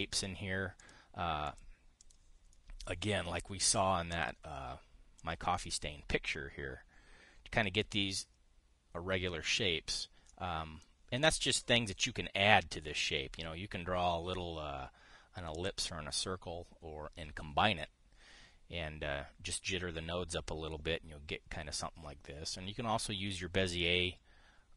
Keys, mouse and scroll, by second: 1.5 click, 2.1 click, 2.7 click, 4.3 click, 4.8 click, 5.9 click, 11.0 click, 12.1 click.